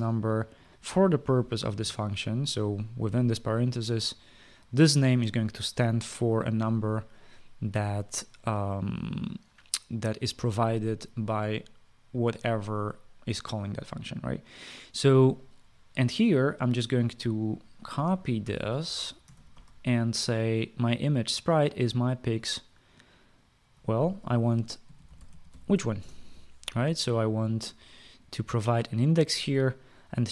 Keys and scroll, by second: 2.4 {, 2.5 Return, 19.1 ctrl+c, 20.0 ctrl+v, 25.3-26.9 typing.